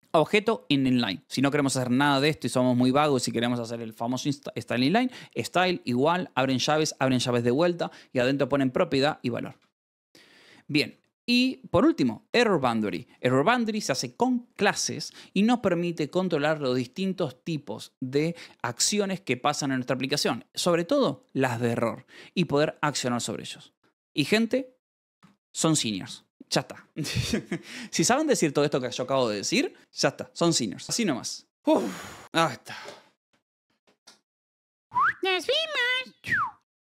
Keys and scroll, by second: 0.0 Escape, 2.2 k, 2.8 Escape, 2.9 j, 3.3 shift+v, 9.4 Escape, 9.6-12.3 typing, 12.7 Escape, 24.4-26.6 typing, 25.6 Escape.